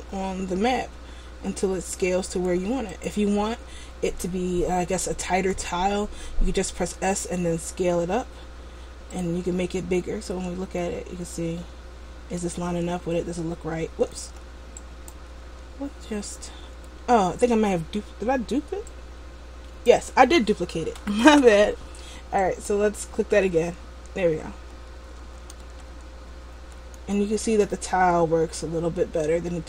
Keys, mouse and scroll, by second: 5.6 s, 9.4 click, 10.4 Tab, 11.0 middle click, 13.1 a, 14.3 a, 15.2 right click, 15.5 Tab, 17.1 Tab, 19.0 click, 21.1 Delete, 22.7 right click, 23.4 Tab, 24.7 a, 25.4 a, 25.9 Tab, 26.8 a, 27.3 middle click.